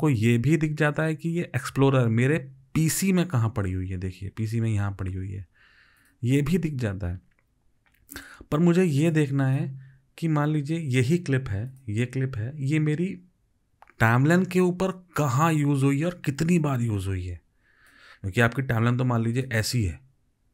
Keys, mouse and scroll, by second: 0.2 double click.